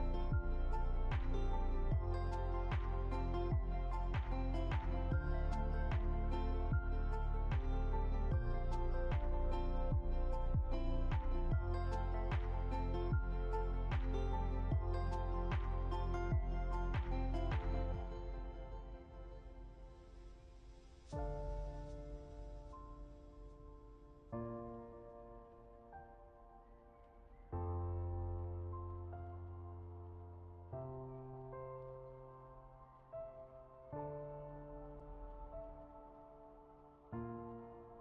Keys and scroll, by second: 20.1 ctrl+z, 24.3 Left, 27.4 Right, 28.0 Up.